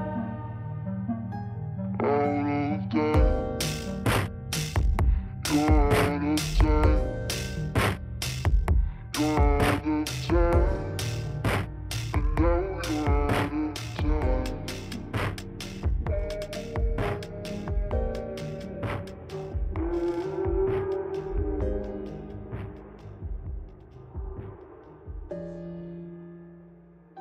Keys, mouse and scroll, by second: 0.2 r, 0.9 g, 3.1 ctrl+r, 4.2 KP_1, 5.7 ctrl+KP_Add, 6.1 alt+z, 6.4 c, 7.5 g, 8.9 KP_3, 9.3 click, 9.7 scroll down 2, 9.9 KP_1, 10.5 shift+a, 12.1 r, 13.4 s, 14.0 g, 14.5 KP_1, 15.6-20.6 typing, 17.4 scroll up 2, 17.6 shift+middle click, 18.7 scroll up 2, 21.9 scroll up 2, 22.0 shift+middle click, 22.4 click, 22.9 scroll up 3, 23.1 scroll down 12, 23.4 shift+middle click, 23.5-24.0 scroll up 1, 24.0 g, 24.9 alt+z, 25.1-26.0 middle drag, 26.0 ctrl+l, 26.4 KP_1, 26.9 alt+z, 27.0 click.